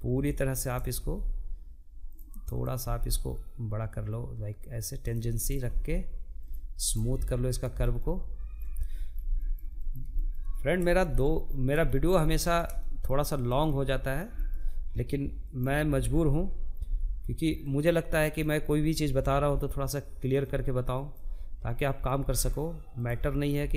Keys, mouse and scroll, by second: 1.1 click, 1.3 g, 3.9 click, 4.1 g, 5.3 click, 5.5 g, 6.2 scroll down 2, 6.4 middle click, 7.2-7.5 scroll up 1, 7.8-12.0 shift+middle drag, 12.0 click, 12.3-14.1 middle drag, 14.1 click, 15.3 g, 16.8 click, 17.7 g, 19.5 click, 20.4 click, 20.6 g, 21.9 click, 22.0 g.